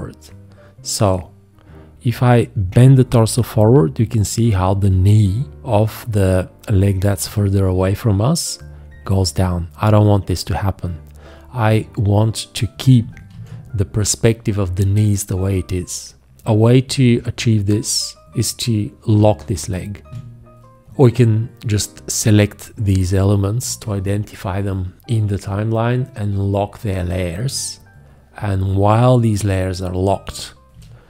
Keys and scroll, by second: 13.3 ctrl+z, 20.1 v, 30.7 g.